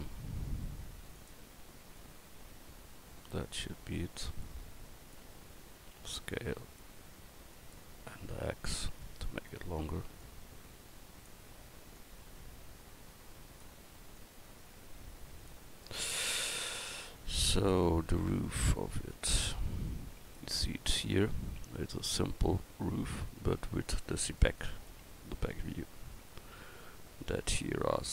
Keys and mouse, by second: 2.0-5.1 drag, 6.0 s, 9.1-9.5 drag, 16.9 a.